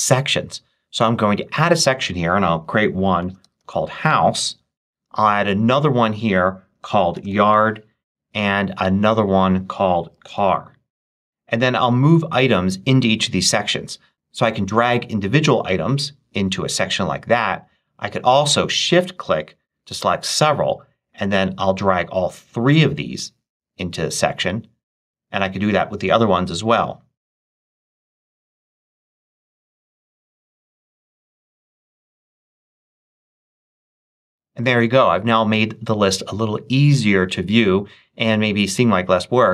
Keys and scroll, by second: 2.8-4.4 typing, 6.7-7.8 typing, 9.8-10.8 typing.